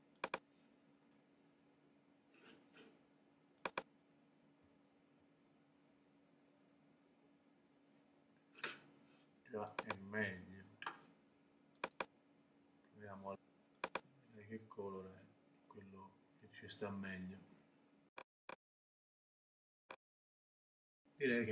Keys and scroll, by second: 4.7 super+BackSpace.